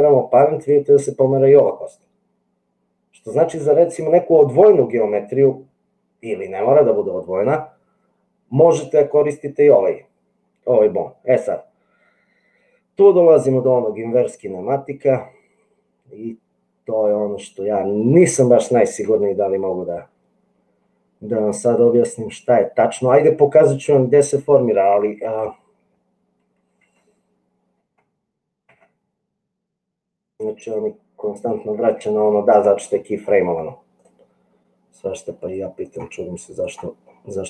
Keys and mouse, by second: 1.5 click, 24.6 click, 27.1 Tab, 28.0 Tab, 35.9-37.0 drag.